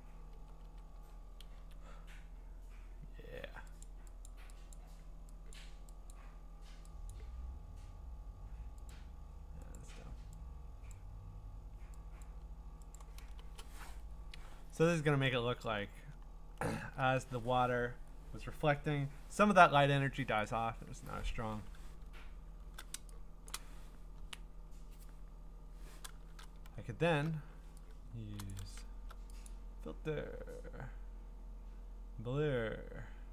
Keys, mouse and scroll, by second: 0.9 Up, 1.5 Down, 3.8 click, 3.8-4.3 scroll, 4.3 click, 4.8 click, 5.5 click, 6.1 click, 7.1 click, 8.9 click, 9.8 click, 10.9 click, 12.2 click, 13.0 click, 13.4 Return, 15.2-16.2 ctrl+scroll, 16.2 scroll down 1, 16.3-17.1 scroll down 2, 21.9 scroll down 3, 22.1 scroll up 3, 22.4 scroll down 1, 22.5-22.9 scroll, 23.5 click, 26.7 scroll, 26.9 middle click, 29.2 click, 29.5 click.